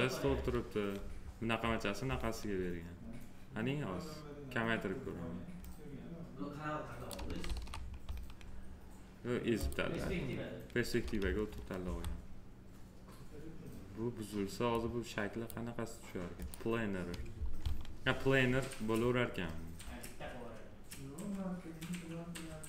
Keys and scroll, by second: 7.4 ctrl+z.